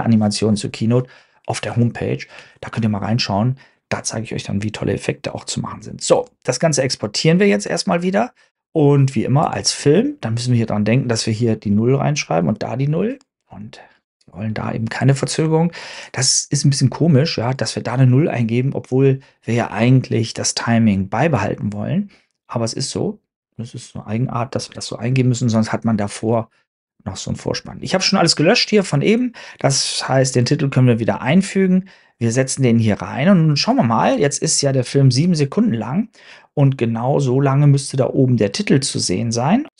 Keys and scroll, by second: 24.6 super+Tab, 25.0 super+Tab.